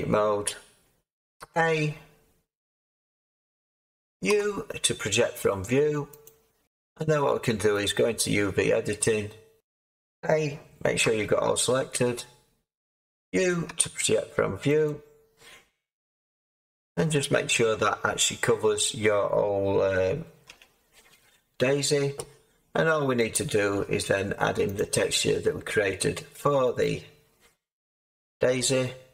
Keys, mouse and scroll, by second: 1.3 a, 4.2 u, 9.6 Tab, 20.4 a.